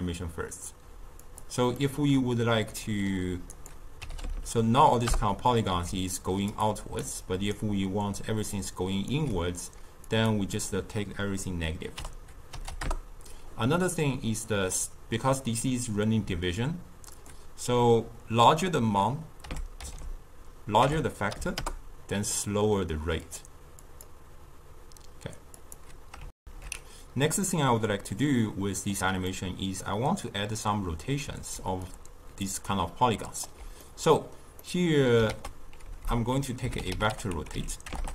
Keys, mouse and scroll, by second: 1.7-3.5 middle drag, 3.5 click, 4.3 0, 5.9 d, 6.1 click, 6.4 d, 6.6 click, 7.0 d, 8.1 click, 8.5 d, 8.6 click, 9.1 d, 10.5-13.6 drag, 17.1-20.2 drag, 23.2-26.3 drag, 26.3 alt+shift+q, 28.1-31.5 middle drag, 31.5 d, 31.8 click, 32.3 d, 32.7 right click, 33.4 d, 33.7-35.2 middle drag, 35.2 ctrl+a, 37.9 BackSpace.